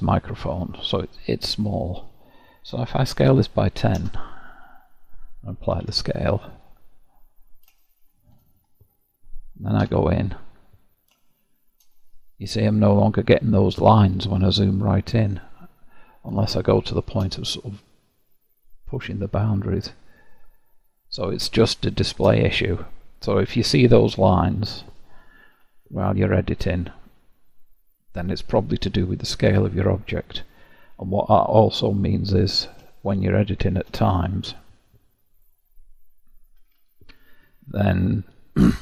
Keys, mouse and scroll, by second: 2.9 s, 4.6 KP_Decimal, 5.7 ctrl+a, 7.1-7.8 scroll up 6, 7.8-8.5 shift+middle drag, 8.5-9.8 scroll up 1, 9.8 Tab, 10.5 scroll up 1, 11.2 shift+middle click, 11.9-13.5 scroll down 1, 13.9-15.1 scroll up 4, 15.1-15.6 scroll down 1, 15.6-16.1 scroll up 4, 16.5-18.0 shift+middle drag, 18.0-18.9 scroll up 1, 20.2-21.5 scroll down 11, 21.5-24.4 shift+middle drag, 24.4-25.5 scroll down 3, 25.5 1, 27.5-30.5 middle drag, 32.9-35.3 shift+middle drag, 35.3 click, 36.5 g, 38.5-38.8 middle drag.